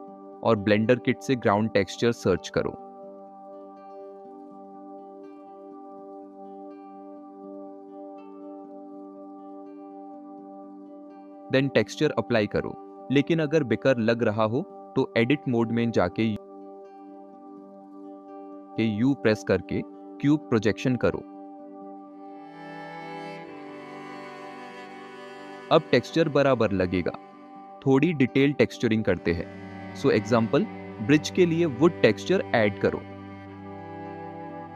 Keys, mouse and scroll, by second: 6.4-8.2 drag, 13.3 click, 18.3-18.7 middle drag, 30.2 click, 30.6-33.4 drag, 34.5-34.7 drag.